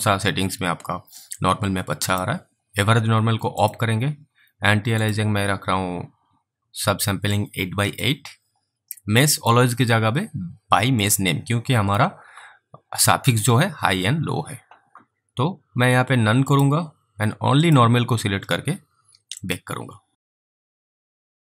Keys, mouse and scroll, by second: 1.3 click, 1.7 click, 3.6 click, 7.6 click, 9.4 click, 16.5 click.